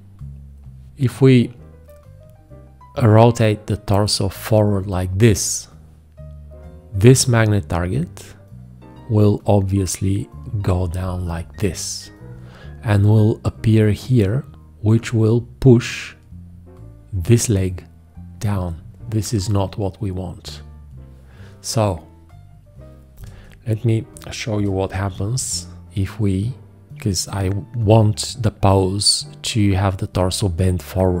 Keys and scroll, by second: 25.1 g.